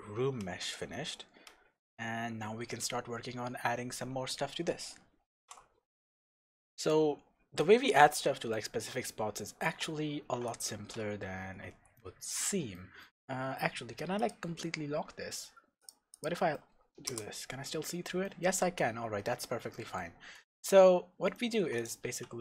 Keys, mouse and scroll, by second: 5.4 ctrl+alt+r, 5.4-14.2 shift+middle drag, 8.0-8.5 scroll down 2, 10.2 shift+b, 10.9-11.9 scroll down 2, 14.2 click, 15.8 click, 16.1 click, 16.5-17.1 scroll down 1, 17.1 KP_0, 18.2-21.8 middle drag, 18.5-19.0 scroll down 1, 19.0 scroll up 1, 20.1-21.0 scroll down 4, 21.0-21.3 scroll up 2, 21.8 click, 22.1 Tab.